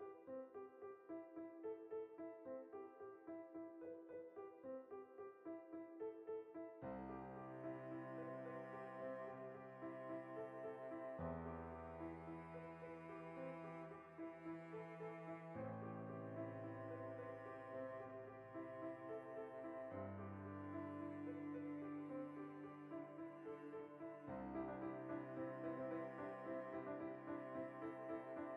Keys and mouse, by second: 0.2 ctrl+r, 1.1 right click, 1.2-2.7 middle drag, 2.0 ctrl+r, 2.7 click, 2.9-4.4 shift+middle drag, 3.7 ctrl+r, 4.4 click, 4.5-7.2 middle drag, 6.1 ctrl+r, 7.2 click, 7.3 ctrl+r, 8.1-11.8 middle drag, 11.8 ctrl+r, 12.3 right click, 12.9-14.3 shift+middle drag, 14.0 ctrl+r, 14.3 right click, 14.4-19.3 shift+middle drag, 19.3 right click, 19.6 l, 22.0 click, 22.5 Tab, 23.1 \, 23.4-25.1 ctrl+middle drag, 23.9 KP_Decimal, 25.1 right drag, 25.3-25.9 shift+middle drag, 25.9 right click, 26.1-26.8 ctrl+middle drag, 26.8 KP_Decimal, 27.0-27.8 middle drag, 27.8 Tab, 28.2-28.5 ctrl+shift+middle drag.